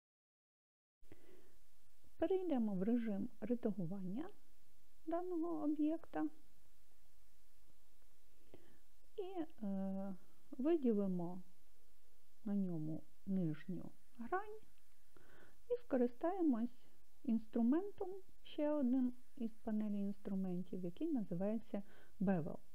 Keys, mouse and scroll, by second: 5.2-7.2 drag, 11.5 click.